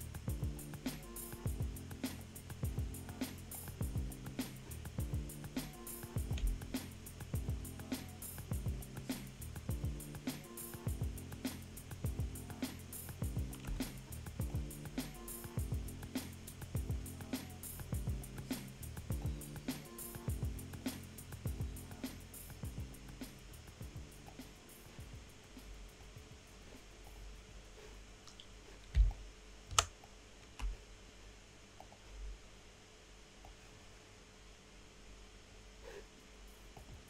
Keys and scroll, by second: 29.0 space.